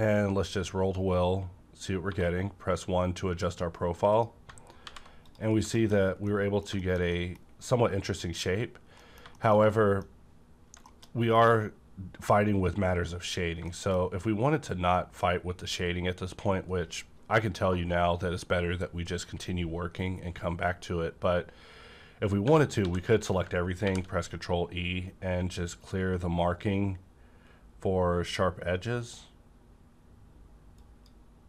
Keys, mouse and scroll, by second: 1.6-2.0 scroll down 1, 2.0 1, 4.1 click, 4.8 alt+v, 5.2 click, 5.5 scroll down 1, 5.7 middle click, 6.2 middle click, 6.7 shift+middle click, 8.9 middle click, 10.1-10.6 scroll up 1, 10.8 shift+middle click, 11.1-12.9 scroll up 1, 13.7 middle click, 14.0 scroll up 1, 22.5 Tab, 22.5 scroll up 1, 22.7 a, 23.7 e, 30.8 click, 30.8 e.